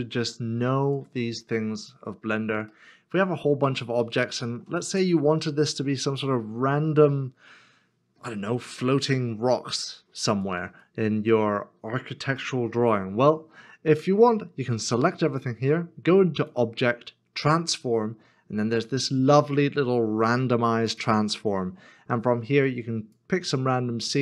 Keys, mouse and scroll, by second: 2.7 middle click, 4.2 shift+middle click.